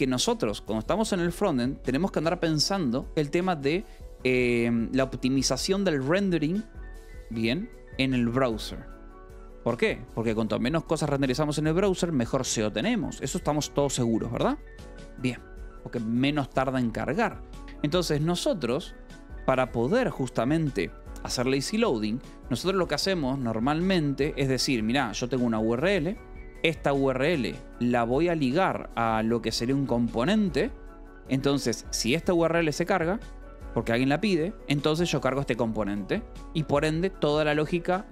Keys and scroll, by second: 18.9 k, 22.8-27.3 typing, 23.5 Escape, 28.4-30.6 typing, 32.2 shift+v, 33.7 Escape, 34.5-35.5 typing, 36.5 Escape, 36.9 o, 37.2 Escape.